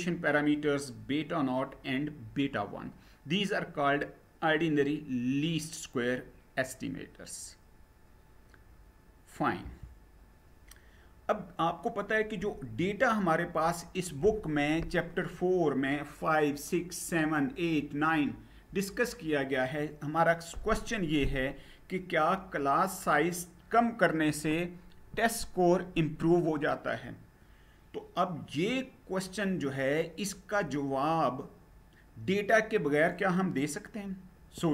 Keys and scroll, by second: 9.2 Down.